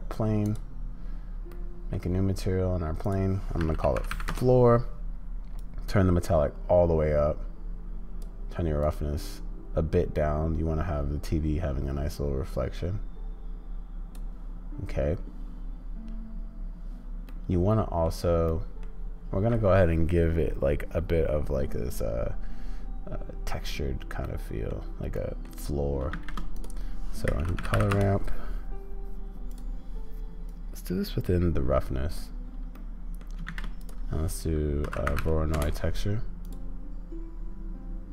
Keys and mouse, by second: 1.5 click, 17.3 click, 18.4 click, 24.2 click, 25.1 click, 26.1 shift+a, 32.7 middle click, 33.4 shift+a.